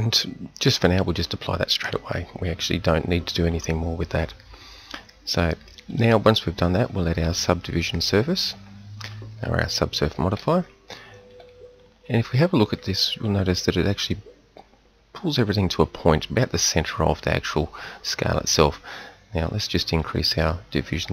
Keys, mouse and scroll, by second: 1.2-7.9 drag, 10.4 KP_1, 11.3 KP_3, 19.4-21.1 middle drag.